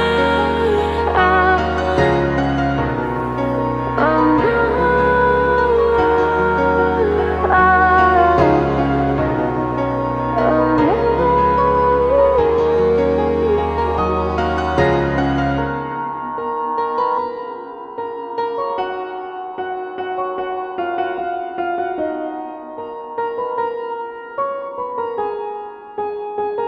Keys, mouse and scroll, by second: 0.0-1.1 scroll up 1, 1.2 ctrl+click, 1.8 middle click, 2.4-3.1 scroll down 1, 3.1 ctrl+click, 4.0 ctrl+click, 4.5-6.0 middle drag, 6.0 ctrl+click, 6.4-7.4 middle drag, 7.4 ctrl+click, 7.7 middle click, 8.7 ctrl+click, 9.1 middle click, 9.9 ctrl+click, 10.4-11.6 middle drag, 11.6 ctrl+click, 12.0-14.5 middle drag, 14.5 click, 14.9-17.1 middle drag, 17.1 ctrl+click, 17.5 middle click, 18.4 ctrl+click, 18.7-20.1 middle drag, 20.1 ctrl+click, 20.4-22.0 middle drag, 22.0 ctrl+click, 23.0 ctrl+click, 23.3-24.4 middle drag, 24.4 ctrl+click, 25.2 ctrl+click, 25.6 middle click, 26.0-26.5 scroll up 4, 26.5-26.6 middle drag.